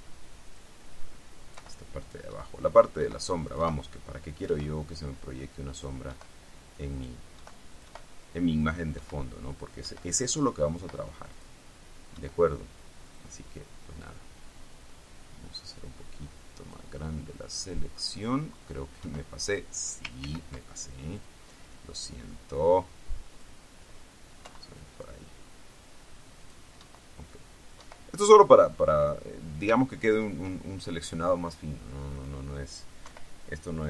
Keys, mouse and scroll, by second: 0.6 click, 1.7 Delete, 2.2 click, 2.5 Delete, 3.0 click, 3.1 Delete, 3.7 click, 4.5 click, 4.6 Delete, 5.9 click, 6.3 Delete, 7.1-7.5 drag, 7.5 Delete, 7.8 click, 8.7 click, 9.1 Delete, 9.7 click, 10.0 Delete, 10.8 click, 10.9 Delete, 11.5 click, 12.3 Delete, 13.2 click, 14.2-17.1 drag, 19.2 Delete, 20.4 ctrl+z, 21.3-21.9 drag, 22.1-23.8 drag, 24.6 Delete, 26.5 click, 26.9 Delete, 27.9 Delete, 30.0 ctrl+scroll down 2, 32.3 click, 33.2 Delete.